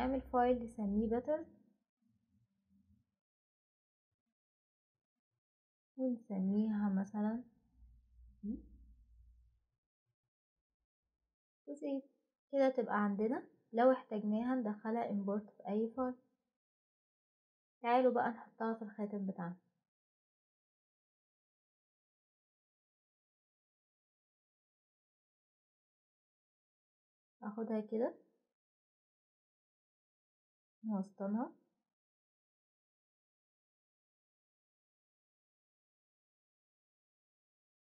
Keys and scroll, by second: 4.1 Return, 4.1 typing, 4.8 Return, 8.5-9.2 typing, 11.6 typing.